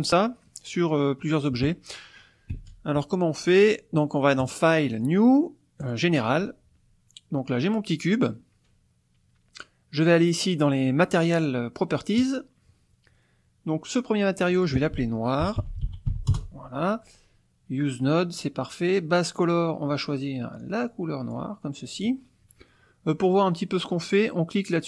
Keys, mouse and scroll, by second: 0.5 click, 2.6 space, 4.4 click, 5.8 click, 12.2 click, 14.6 click, 15.6 shift+n, 15.8 shift+o, 15.9 shift+i, 16.1 shift+r, 16.3 shift+Return, 19.4 click, 20.7-21.8 drag.